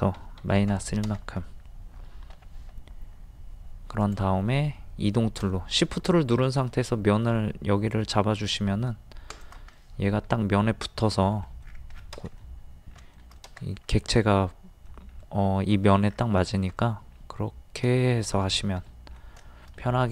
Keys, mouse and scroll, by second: 0.4 KP_1, 2.3 m, 4.0 click, 9.3 shift+click, 9.7 middle click, 11.6 scroll down 1, 12.4 middle click, 16.1 scroll down 1, 16.8 middle click, 18.0 shift+middle click, 18.5-18.8 scroll down 1, 19.2 middle click.